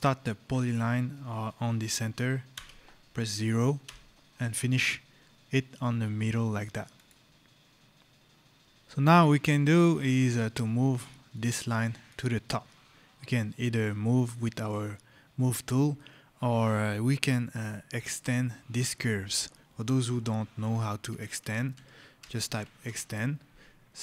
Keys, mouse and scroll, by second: 0.4-1.9 scroll, 2.3 KP_0, 3.7 Return, 6.8 click, 7.5-8.3 scroll, 8.7 right click, 8.8 scroll, 9.8 right click, 10.0 scroll, 11.2 click, 11.6 right click, 15.8 right click, 17.2 scroll, 20.0-22.5 typing, 22.7 Return.